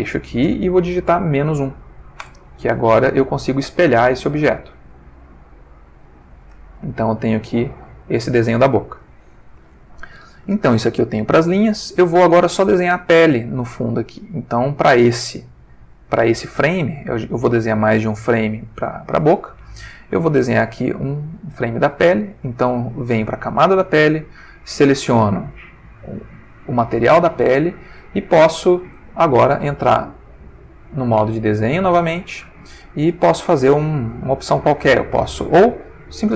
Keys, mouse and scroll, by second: 1.3 -, 1.5 1, 2.2 Return, 3.8 g, 5.7 click, 6.7-7.5 ctrl+middle drag, 7.6-9.1 ctrl+middle drag, 20.5 click, 24.1 click, 25.2 click, 29.7 Tab, 31.0 click, 32.1 click, 36.1 click.